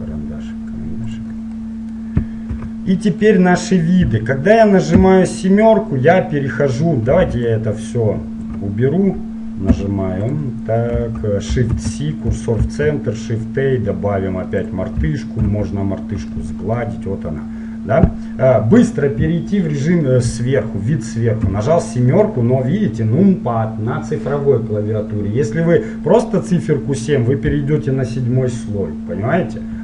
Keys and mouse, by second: 1.2-3.5 drag, 2.6 KP_5, 5.1 KP_7, 6.5-7.7 middle drag, 7.7-9.5 drag, 9.8 Delete, 11.8 shift+c, 12.8 shift+a, 15.7 ctrl+4, 16.5-19.1 middle drag, 19.3 middle click, 21.5 KP_7.